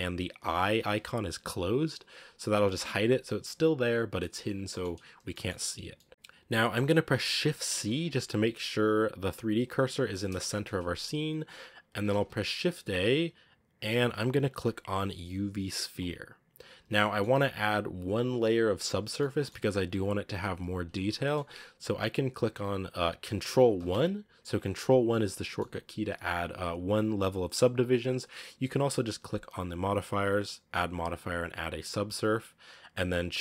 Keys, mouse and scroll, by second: 2.0 click, 2.4 click, 4.0-7.5 middle drag, 7.5 shift+c, 9.5 click, 9.8 click, 10.2 shift+c, 16.8-19.6 shift+middle drag, 19.6-20.9 scroll up 1, 20.9-23.7 shift+middle drag, 23.7 ctrl+1, 25.3-30.6 shift+middle drag, 32.6-33.4 middle drag.